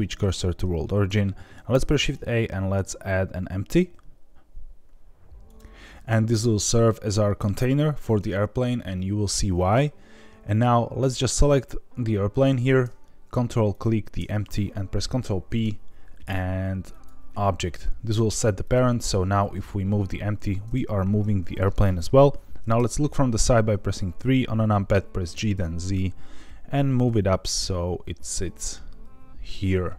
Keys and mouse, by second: 1.9 shift+a, 11.1 click, 15.4 ctrl+p, 18.6 click, 19.5 g, 20.3 Escape, 22.7 KP_3, 25.3 g, 25.5 z.